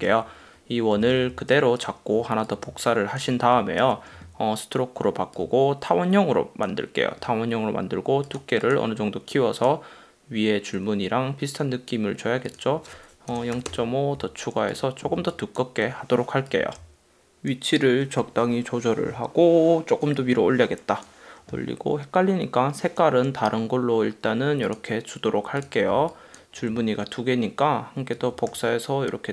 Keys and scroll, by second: 0.3 super+;, 1.1 v, 3.9 shift+x, 13.6 5, 13.8 Return, 15.3 space, 26.0 space.